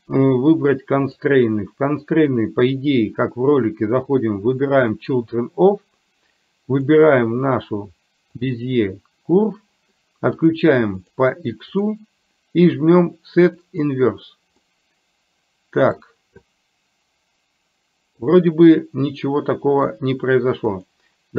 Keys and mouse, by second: 1.2 click, 2.3-5.2 drag, 6.9-8.7 drag, 11.1 click, 11.8 click, 13.6 click, 14.7-16.1 middle drag, 18.4-19.9 middle drag, 20.8-21.3 drag.